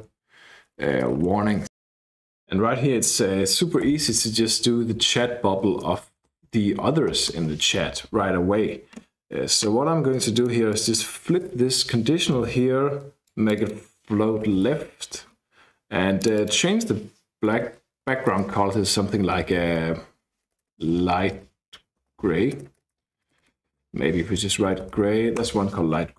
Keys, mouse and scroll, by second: 0.0-2.0 typing, 2.3-3.4 drag, 4.1 ctrl+c, 5.0 Down, 5.1 Down, 5.8 Up, 6.2 Return, 7.4 ctrl+v, 9.0-10.1 scroll up 2, 10.4 click, 11.7 shift+BackSpace, 11.8 shift+1, 13.3 click, 14.2-15.2 typing, 16.2 click, 17.5 r, 17.8 e, 18.4 BackSpace, 19.2 Down, 19.4 Down, 19.6 Down, 19.8 Down, 20.5-24.5 typing, 24.6 Down, 24.8 Down, 25.0 Down, 25.1 Down, 25.4 Return.